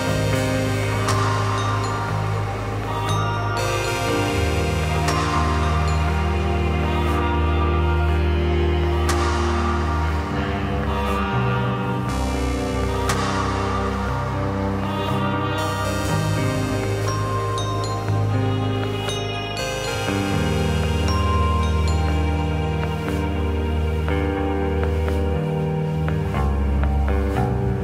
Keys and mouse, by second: 0.5 drag, 0.8 middle click, 1.9-5.5 drag, 5.8-6.5 shift+middle drag, 6.6 Tab, 8.0 middle click, 8.9-9.3 drag, 11.0-11.9 drag, 12.4 shift+drag, 13.1 shift+click, 13.9 shift+click, 14.4 middle click, 15.4 shift+click, 16.1 click, 16.1 middle click, 16.1 right click, 16.4 shift+click, 17.6-18.6 shift+drag, 18.9 click, 18.9 middle click, 18.9 right click, 20.0 shift+click, 21.1 middle click, 21.7-22.8 shift+drag, 23.3-23.7 middle drag, 24.3 shift+click, 25.2-26.6 middle drag, 26.8 middle click.